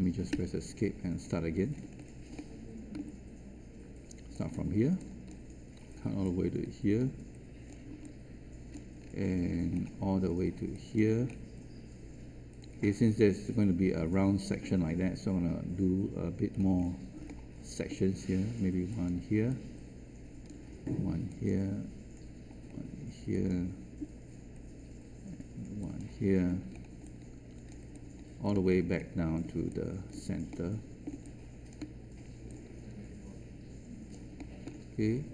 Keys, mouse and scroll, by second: 0.3 Escape, 1.6-2.1 scroll up 1, 2.3 alt+middle click, 4.3 click, 5.3-7.8 alt+drag, 8.0 alt+click, 8.9-9.7 scroll down 1, 10.7 click, 11.2-11.5 scroll down 1, 16.5-17.0 scroll up 1, 17.2 alt+middle click, 18.8 click, 20.2 alt+click, 21.2 click, 26.4 scroll down 1, 27.0 alt+click, 27.9 alt+click, 28.6-29.1 scroll up 1, 29.6 alt+click, 30.4 alt+middle click, 31.2 alt+click, 32.1 scroll up 1, 32.8-34.1 alt+drag, 34.3 alt+middle click.